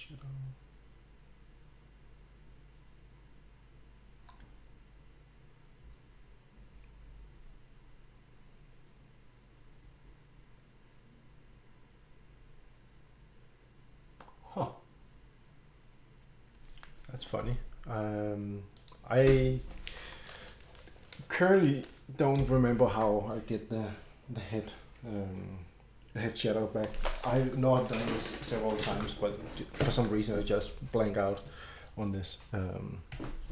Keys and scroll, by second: 33.1 Escape.